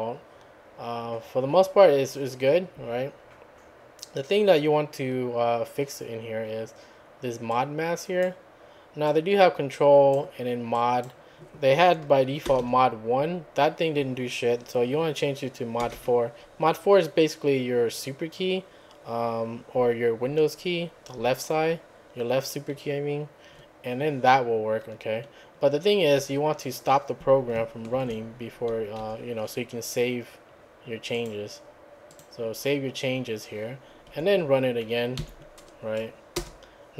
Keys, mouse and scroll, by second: 7.5 click, 9.1 click, 10.7 click, 12.5 BackSpace, 12.6 1, 15.8 BackSpace, 15.9 4, 26.2 `, 27.9 ctrl+c, 29.0 `, 31.1 click, 32.1 click, 34.1 `, 35.2 Up, 36.4 Return.